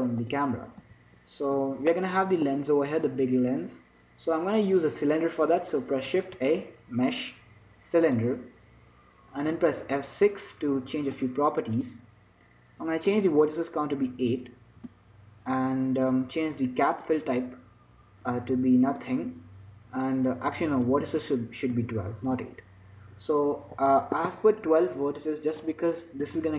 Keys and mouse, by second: 0.6-2.2 drag, 1.1 z, 2.2-4.3 middle drag, 6.5 shift+a, 10.6 F6.